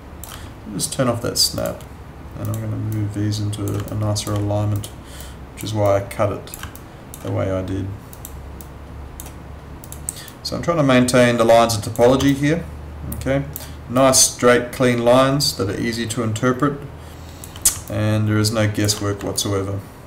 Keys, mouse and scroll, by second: 3.9 alt+click, 6.7 alt+click, 12.3 alt+click, 17.8 alt+click, 19.3 alt+click.